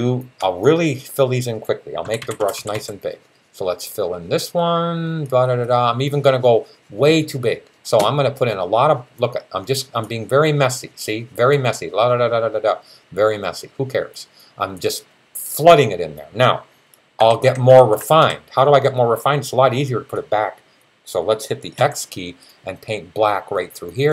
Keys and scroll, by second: 1.8-2.6 typing, 17.0-18.0 typing, 21.6 x.